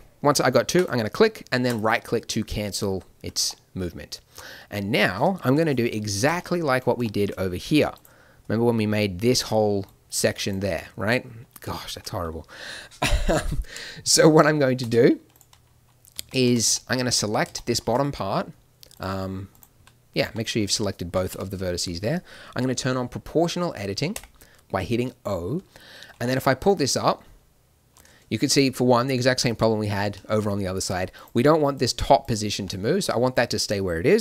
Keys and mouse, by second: 3.5 middle click, 4.4-7.2 middle drag, 5.4 KP_1, 9.8 d, 10.5 d, 11.2 d, 11.4-13.9 drag, 14.8 Escape, 16.1 a, 16.4 z, 16.6 b, 17.3 z, 19.7 z, 20.4 middle click, 21.3 KP_1, 22.9 middle click, 24.1 o, 26.1 g, 31.1-34.2 right drag, 32.5 b.